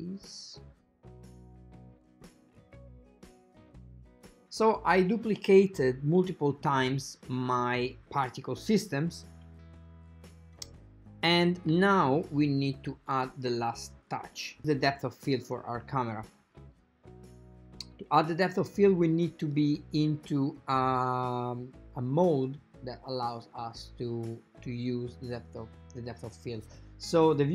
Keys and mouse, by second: 1.1 click, 1.8 g, 3.1 KP_0, 3.2 shift+d, 3.7 click, 4.4 click, 6.3-8.0 drag, 11.7-14.6 drag, 18.4 click, 23.0 click, 23.0 right click, 23.9 click, 23.9 right click.